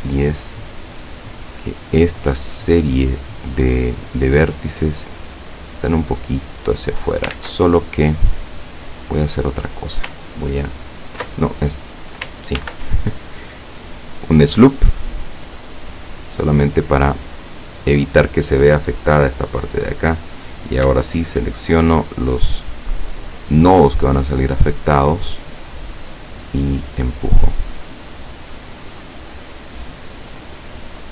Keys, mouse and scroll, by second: 2.1-3.9 middle drag, 5.0-7.4 drag, 7.4 ctrl+z, 7.7-9.7 ctrl+middle drag, 11.4 ctrl+middle click, 12.6 ctrl+r, 13.7 click, 18.0 click, 20.7 right click, 21.2 shift+right click, 21.7 shift+right click, 22.5 shift+right click, 23.5 shift+right click, 24.5 middle click, 25.9-27.8 drag, 27.9 middle click, 28.9-29.3 scroll down 1, 29.5-30.6 middle drag, 30.9-31.1 middle drag.